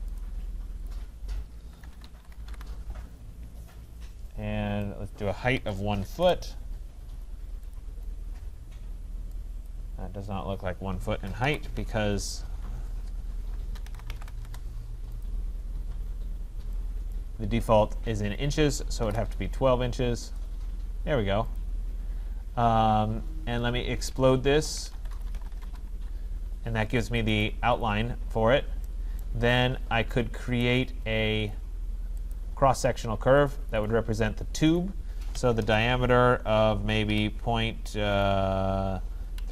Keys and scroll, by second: 6.2 Return, 11.4 Delete, 14.4 Return, 25.6 Return, 35.6 Return.